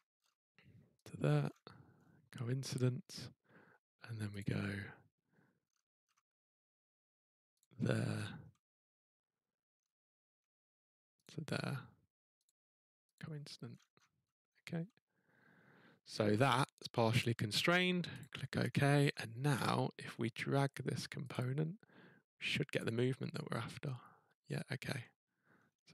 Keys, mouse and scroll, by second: 1.0 click, 1.5-2.0 scroll, 2.6-3.1 scroll, 4.4 click, 5.6-6.1 scroll, 7.6 click, 7.9 scroll, 9.3-10.4 scroll, 11.2 click, 12.4 click, 13.2 click, 13.7-14.3 scroll, 17.2-18.2 scroll, 18.2 click, 18.7-19.0 scroll, 19.6 click, 20.4 scroll, 21.3 click, 22.8 click, 25.5 scroll, 25.6 scroll up 5.